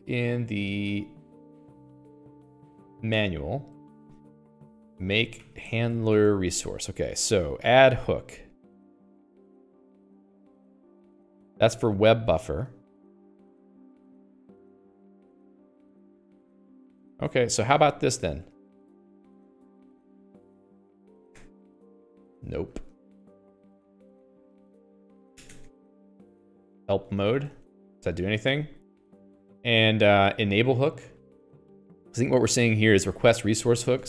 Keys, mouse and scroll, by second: 17.6-31.5 typing, 18.1 Escape, 22.8 Escape, 25.4 Escape, 33.3-34.0 typing.